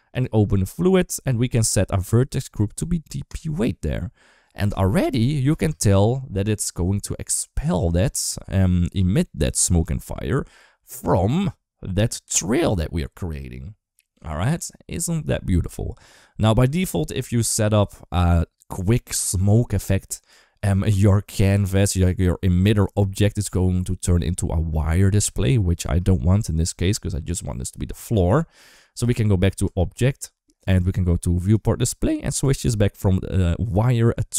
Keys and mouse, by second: 1.8-3.4 drag, 5.4 space, 6.7-8.3 middle drag, 9.6 middle click, 14.1 middle click, 29.5 click, 31.3 click, 32.7-34.3 drag.